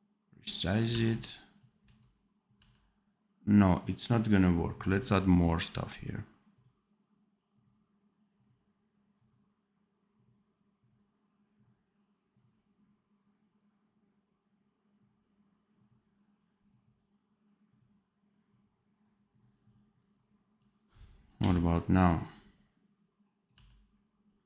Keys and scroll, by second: 0.8 v, 1.7 c, 2.6 v, 21.3 x, 23.5 v.